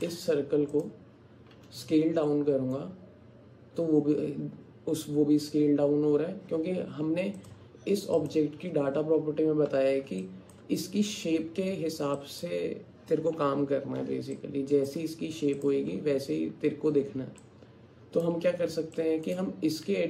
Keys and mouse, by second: 0.0 click, 0.8 click, 1.5 s, 10.2 alt+click, 12.2 alt+click, 14.4 alt+click, 15.6 click, 17.4 alt+click, 19.0 shift+click.